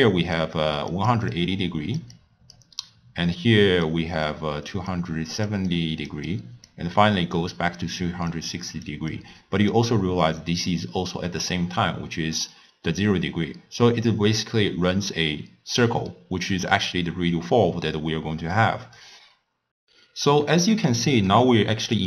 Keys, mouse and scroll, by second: 0.0-10.5 typing, 0.0 click, 1.0 click, 1.4 click, 2.2 click, 3.9-4.3 drag, 5.0-5.6 drag, 5.7 click, 6.4 click, 7.5 click, 8.4 click, 9.2 click, 10.7 click, 11.6-19.7 d, 21.3-22.0 middle drag.